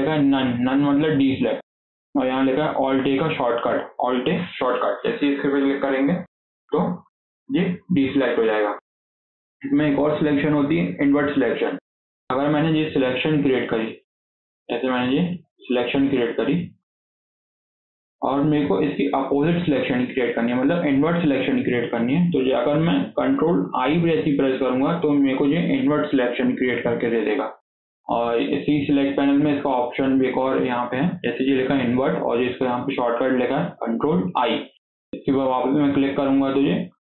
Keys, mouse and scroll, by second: 12.7 z, 14.5 click, 15.8 alt+z, 16.6 click, 17.7 alt+z, 23.7 ctrl+i, 29.1-32.2 drag.